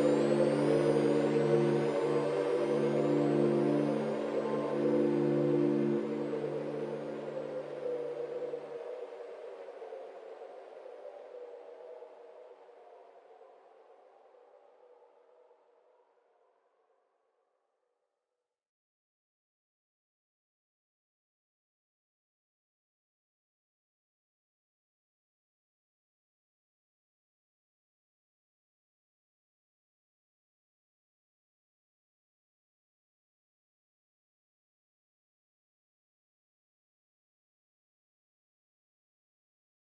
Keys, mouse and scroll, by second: 0.4 shift+d, 1.3 shift+d, 2.1 shift+d, 3.1 shift+d, 4.4 click, 4.7 g, 5.5 shift+d, 6.7 shift+d, 7.4 scroll down 4, 7.5 middle click, 8.0 scroll up 2, 8.3-9.1 middle drag, 9.1 click, 9.3 scroll up 2, 9.6 scroll down 3, 9.7 middle click, 10.5 click, 10.8-11.8 drag, 12.0 click, 12.5 click, 13.0 click, 13.6 click, 14.0 click, 14.4-15.0 scroll up 3, 15.0-15.3 scroll down 3, 15.3 click, 15.5-16.0 scroll down 7, 16.0 click, 16.7 KP_7, 17.3 click, 17.6 click, 17.8-18.2 scroll down 3, 18.2 g, 19.2 click, 20.7 scroll up 3, 20.8-21.4 middle drag, 21.4 click, 22.2 scroll down 1, 22.4-23.1 middle drag, 23.1-24.1 drag, 25.6-26.1 scroll up 3, 26.1 scroll down 3, 26.3-26.9 middle drag, 26.9 scroll up 2, 27.2 scroll down 1, 27.3-28.3 middle drag, 29.6-30.9 scroll down 1, 30.9 ctrl+alt+KP_0, 32.9-34.3 scroll up 8, 34.3 click, 35.4 g, 37.5-39.8 scroll up 2.